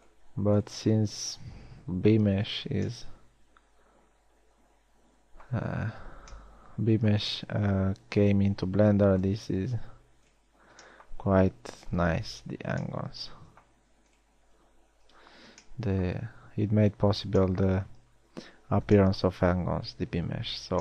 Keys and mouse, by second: 3.0 f, 6.6 a, 13.1 f, 15.7 f.